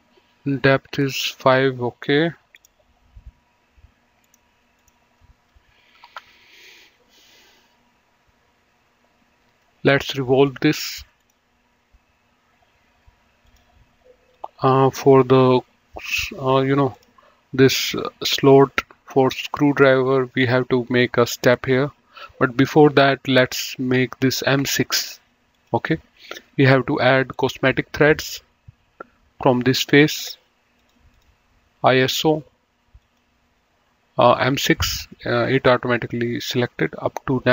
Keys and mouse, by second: 2.9 click, 4.3 click, 6.3 KP_5, 6.5 KP_Enter, 10.8 click, 13.7 click, 17.3 click, 25.8 click, 27.7 click, 30.1 click, 33.3 click.